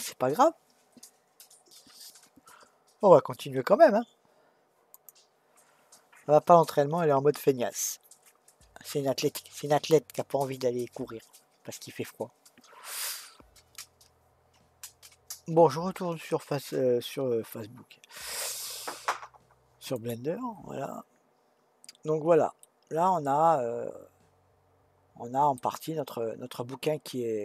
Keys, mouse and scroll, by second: 22.0-22.6 scroll down 1, 22.6-25.6 middle drag, 26.6-27.4 scroll up 1.